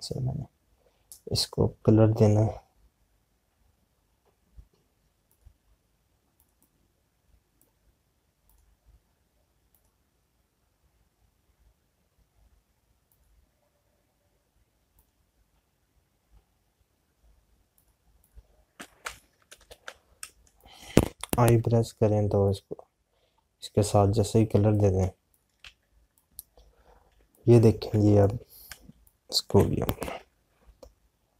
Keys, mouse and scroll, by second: 6.1 click, 13.9 click, 18.8 click, 21.2 space, 22.6 i, 23.4 click, 23.9 scroll down 1, 25.7 click, 26.8 z, 27.1 click, 29.8 space, 30.0 click, 30.2 space.